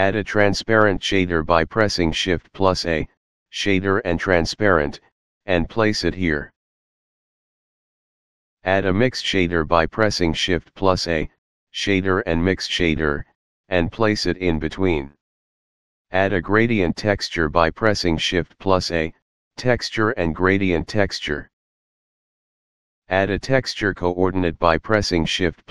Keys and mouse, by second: 2.6 click, 7.3 click, 8.0 click, 8.9 shift+a, 11.9 click, 15.2 click, 20.4 click, 21.6 click, 22.3 click, 23.0 shift+a.